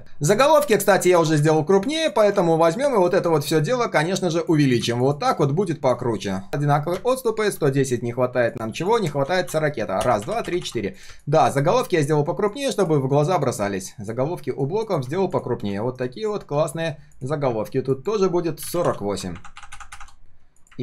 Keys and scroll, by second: 1.2 ctrl+alt+c, 2.9 ctrl+alt+v, 15.8 ctrl+alt+v, 16.5 ctrl+z.